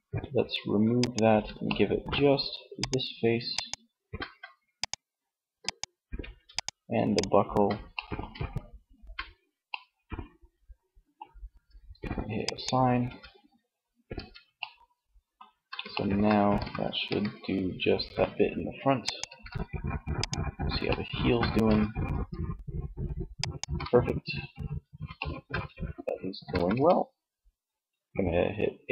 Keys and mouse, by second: 0.1-2.0 middle drag, 11.5 click, 12.1 Tab, 12.6 click, 13.1 Tab, 15.5 r, 18.5 ctrl+z, 20.6 r, 22.7 ctrl+z, 25.5 a, 25.8 a.